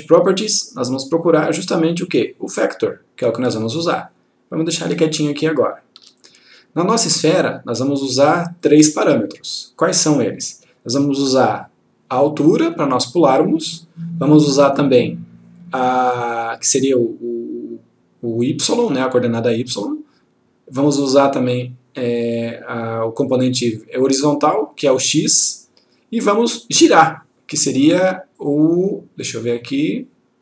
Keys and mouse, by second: 3.7 click, 5.5 ctrl+click, 8.7-9.9 click, 28.5-29.1 click.